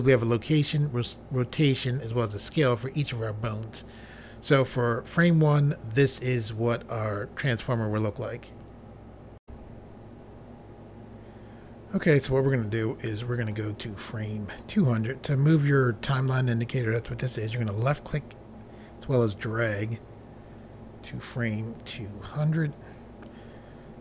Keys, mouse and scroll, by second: 9.4 Pause, 17.3 click.